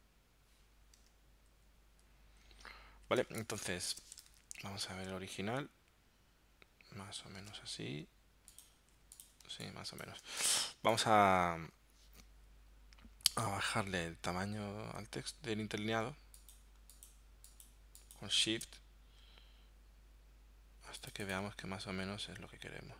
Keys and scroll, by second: 3.3 space, 4.4 super+Tab, 7.5 super+Tab, 9.0 z, 9.4 space, 10.4 v.